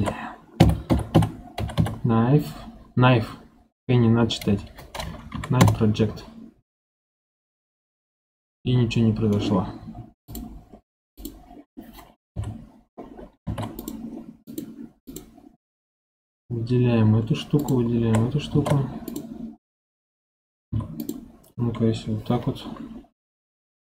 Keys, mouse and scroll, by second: 7.3-10.2 middle drag, 10.2-11.2 drag, 12.2 KP_7, 13.4 ctrl+Tab, 14.4 click, 15.0 click, 17.5 shift+click, 18.4 ctrl+Tab, 20.6 1, 20.9 click.